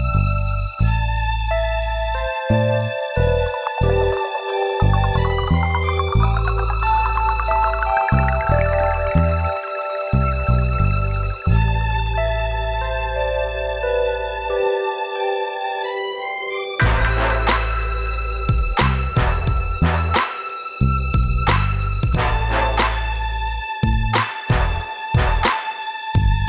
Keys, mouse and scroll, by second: 1.4 click, 1.9 middle click, 14.6 click, 14.7 click, 15.2 middle click, 25.4-25.8 scroll down 2, 26.3 middle click.